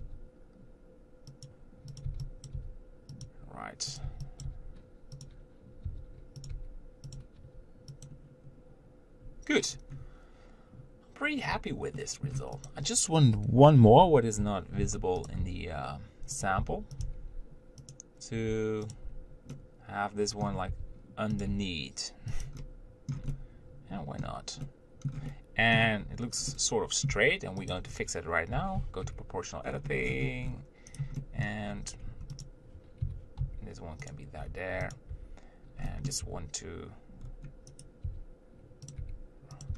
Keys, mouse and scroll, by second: 0.0 b, 0.3 g, 2.2 click, 2.8 g, 4.3 b, 4.7 g, 6.1 e, 6.8 g, 7.6 s, 8.6-10.0 scroll down 1, 10.0-11.1 scroll down 1, 11.1-11.8 scroll down 1, 11.8-12.2 scroll down 1, 12.2 shift+middle click, 12.9 click, 14.1 ctrl+l, 15.1 shift+d, 15.6 r, 17.2 g, 18.6 r, 19.7-20.9 middle drag, 20.9 r, 21.7 g, 23.3-26.1 middle drag, 26.1 scroll up 1, 26.1 Tab, 26.7 middle click, 27.3 Tab, 27.9 click, 28.8 o, 31.4 middle click, 31.9-32.3 scroll down 1, 32.3 Tab, 32.7 click, 33.3 g, 35.2 click, 35.4 Tab, 36.1 middle click, 36.5 r, 38.3 r, 39.3 g.